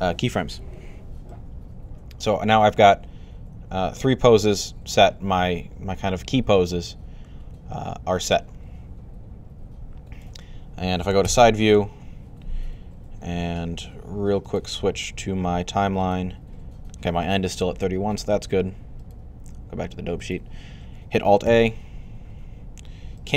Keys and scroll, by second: 11.1 3, 21.3 alt+a.